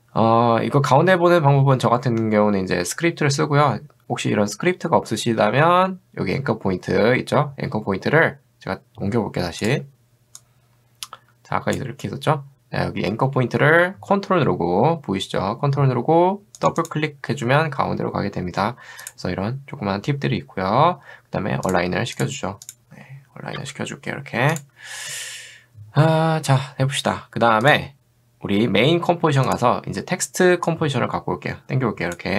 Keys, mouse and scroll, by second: 10.9 click, 16.6 ctrl+click, 16.8 ctrl+click, 19.1 click, 22.2 click, 23.6 v, 24.5 click, 27.6 click, 29.5 click, 30.7-32.2 drag.